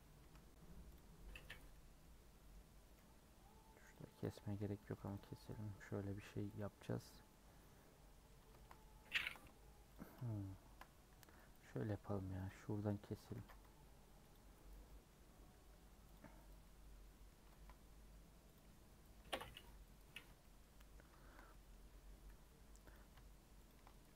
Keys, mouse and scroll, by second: 0.2 2, 1.7 middle click, 2.0-2.3 scroll up 1, 2.3 middle click, 2.5 scroll down 2, 2.7 middle click, 3.1-3.9 scroll up 1, 4.3 middle click, 5.1 alt+Left, 5.7 a, 6.6 u, 7.3-9.9 middle drag, 9.9 alt+click, 11.1 a, 13.3 ctrl+z, 14.3 alt+Left, 14.9-16.1 middle drag, 16.1 alt+Left, 16.6-17.7 middle drag, 17.7 scroll up 3, 18.5 alt+click, 20.2 scroll down 2, 20.4-21.8 shift+middle drag, 21.8-22.1 scroll up 1, 22.9 alt+click.